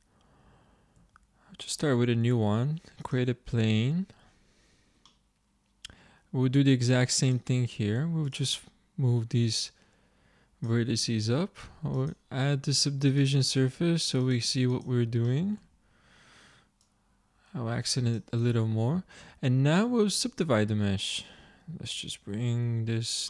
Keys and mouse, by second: 1.1 z, 2.2 shift+a, 6.7 Tab, 11.0 Tab, 15.3 click, 15.7 Tab, 18.6 middle click, 19.3 Tab, 21.9 Tab, 22.6 Tab.